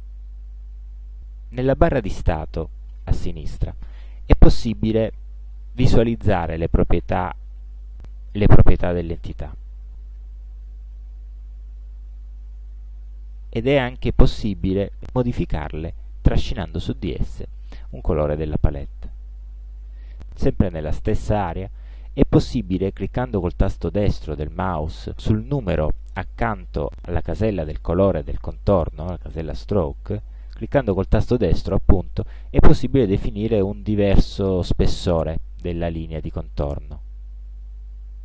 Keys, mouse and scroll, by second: 15.3-17.2 drag, 32.3 right click, 36.7 click.